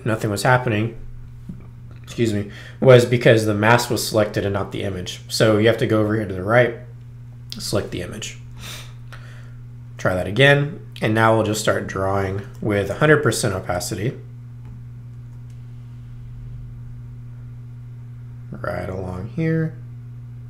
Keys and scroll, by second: 12.4 i, 12.9 0.